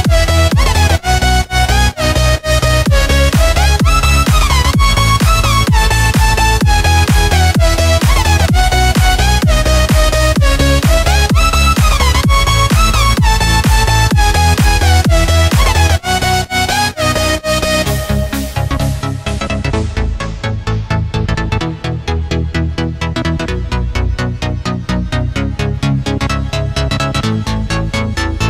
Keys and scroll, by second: 7.9 a, 9.4 Tab, 11.6 Tab, 13.6 Tab, 15.5 Tab, 17.0 v, 18.5 a, 20.1 Tab, 26.3 v, 27.3 space.